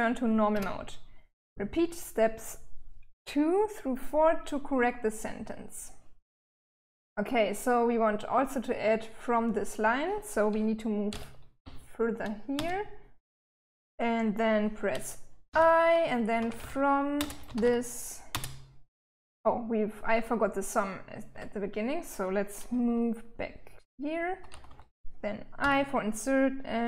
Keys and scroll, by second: 10.5 l, 11.9 space, 14.9-17.7 typing, 19.1 typing, 20.7 Escape, 22.3-25.0 typing, 26.7-26.8 typing.